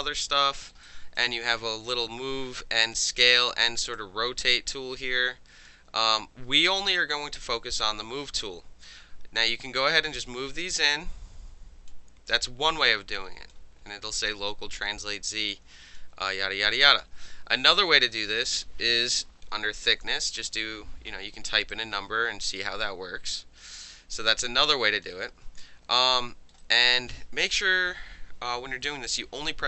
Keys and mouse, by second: 0.6 alt+middle click, 0.8-1.2 alt+right drag, 3.9-5.7 drag, 5.8 ctrl+z, 9.4-11.9 drag, 12.6-13.5 alt+drag, 15.5-16.0 alt+drag, 17.0 ctrl+z, 18.2 click, 19.3 KP_Subtract, 19.8 KP_2, 21.7-23.8 alt+drag, 24.7-25.0 alt+drag, 25.3 ctrl+z, 26.0 alt+click, 26.4 alt+middle click, 26.6 alt+right click, 26.8 alt+drag.